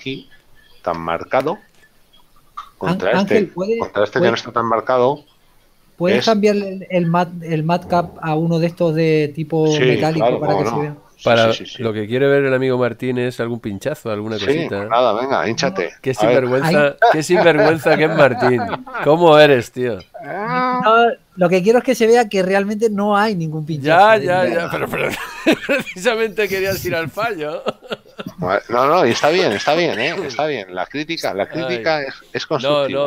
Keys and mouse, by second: 3.7 shift+middle click, 6.8 Tab, 9.4 Tab, 11.8 click, 15.1 middle click, 15.7 shift+middle click, 19.4 shift+middle click, 21.8 middle click.